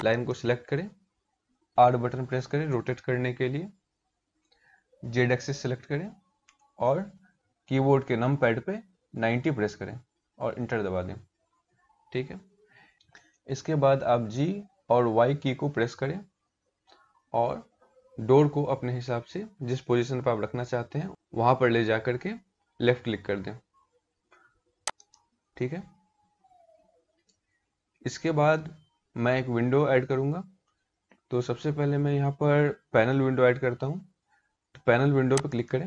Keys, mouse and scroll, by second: 1.2 r, 14.0 g, 35.0 click.